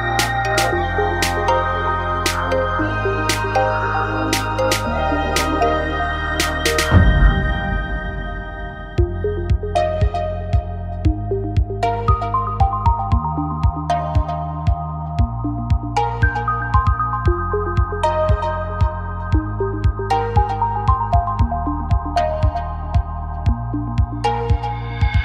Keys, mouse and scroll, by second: 0.4 right click, 1.5-3.9 right drag, 2.1 f, 2.2 a, 3.8 f, 3.9 a, 5.7 click, 6.5-8.1 right drag, 6.8 s, 8.1 middle click, 9.0 click, 9.3 a, 11.3 right click, 12.1 w, 13.5 right click, 13.8 w, 14.7 click, 15.2 right click, 16.1 s, 17.8 click, 18.8 a, 19.1-20.1 right drag, 19.8 w, 21.2 click, 22.3 right click, 22.9 w, 24.0-25.0 drag, 25.0-25.2 right drag.